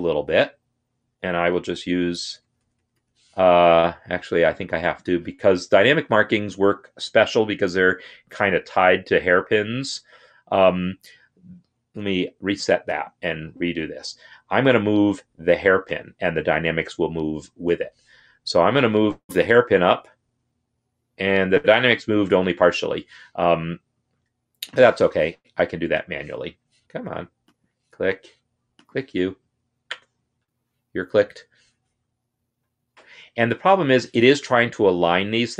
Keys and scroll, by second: 0.5 Up, 1.0 Up, 1.4 Up, 1.6-2.6 Up, 6.0 Escape, 10.2 F8, 19.1 Down, 19.9 Down, 21.9 Down, 22.4 Up, 30.2 Escape, 31.9 Up, 33.3 Down.